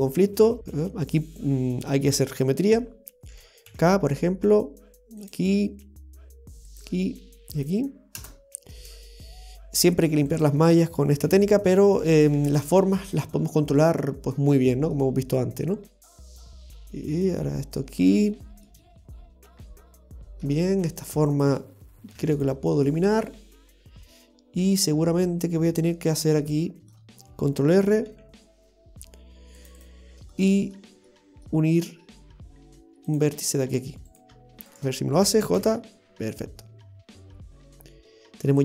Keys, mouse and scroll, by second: 10.3 right click, 11.2 x, 12.1 right click, 12.3 x, 12.8-13.2 scroll down 2, 13.2 middle click, 14.3 middle click, 16.0-16.4 scroll up 2, 16.4 shift+middle click, 16.6 shift+middle click, 18.7 shift+middle click, 21.3 right click, 22.1 x, 23.3-23.8 scroll up 1, 24.7 middle click, 26.9-27.7 scroll up 1, 28.1 ctrl+r, 30.3 middle click, 32.2 scroll down 1, 33.1 click, 33.1-34.1 scroll down 2, 34.1 right click, 34.7 shift+right click, 35.6 i, 36.2-37.1 scroll down 1, 38.5 middle click.